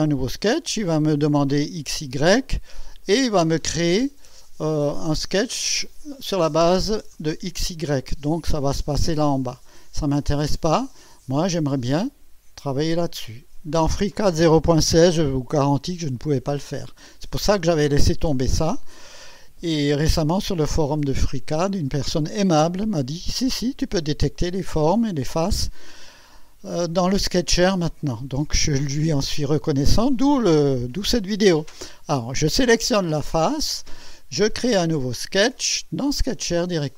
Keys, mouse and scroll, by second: 3.0 click, 3.7-4.8 drag, 10.0-10.8 drag, 10.9-11.7 drag, 12.6 click.